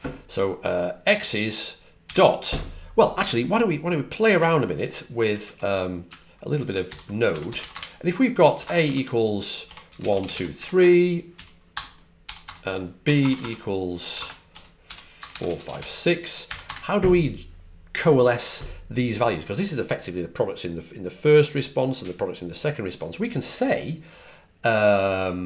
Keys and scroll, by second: 0.7-2.0 typing, 5.2 super+Tab, 7.2-16.6 typing.